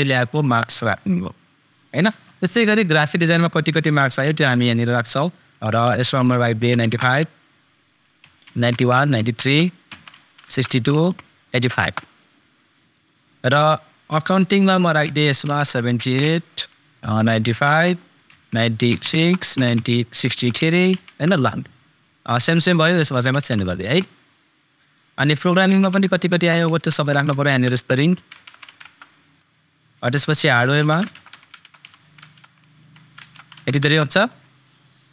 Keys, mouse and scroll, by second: 2.9 super+click, 6.9 super+Return, 12.9 super+click, 15.9 super+Return, 17.2 super+BackSpace, 17.6 super+Return, 22.5 super+click, 23.7 super+Return, 24.9 super+click, 26.2 super+Return, 30.1 super+click, 31.0 super+Return, 34.8 super+click.